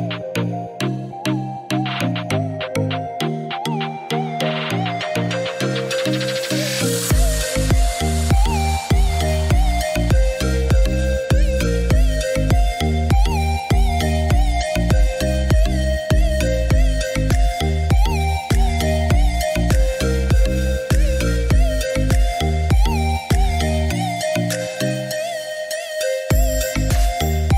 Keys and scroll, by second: 12.0 1, 12.6 6, 13.6 5, 14.0 Return, 16.4 Escape, 21.9 2, 22.7 5, 23.0 Return, 24.8 Escape.